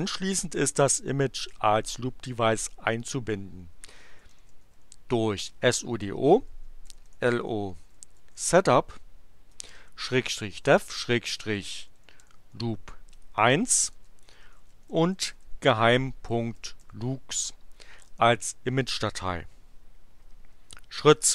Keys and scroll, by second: 3.6-5.1 typing, 6.5-12.8 typing, 13.9-17.5 typing, 18.1 Return.